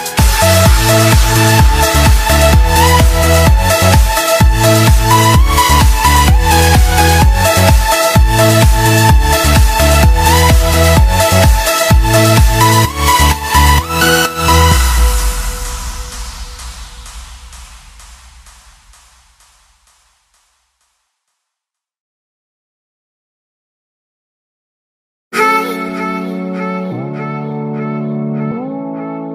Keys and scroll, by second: 2.5 space, 3.7 ctrl+-, 8.3 space, 18.6 space, 20.9 space, 25.6 space, 28.9 space.